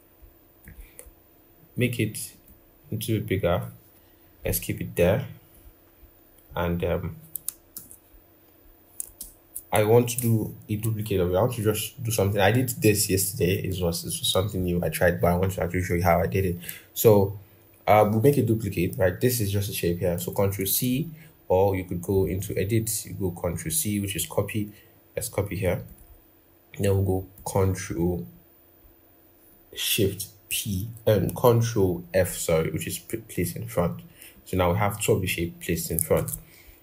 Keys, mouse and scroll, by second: 6.3-7.0 scroll, 7.5 ctrl+-, 8.5-8.8 scroll down 1, 9.0 ctrl+=, 20.4 ctrl+c, 35.9 ctrl+z.